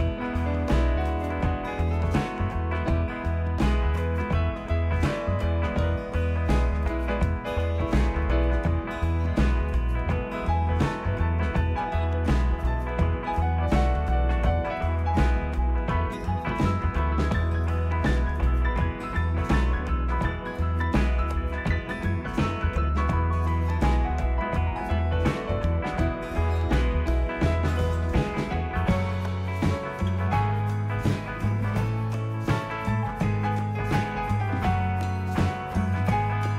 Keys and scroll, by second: 36.5 ▬.